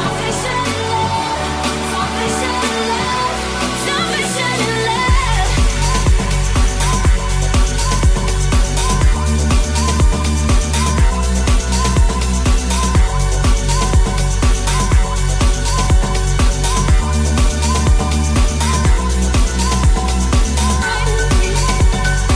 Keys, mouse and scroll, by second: 1.3 g, 2.1 r, 3.7 g, 8.6-10.5 drag, 10.5-21.5 middle drag, 10.5 s, 10.5 g, 22.1 right click, 22.2 middle click.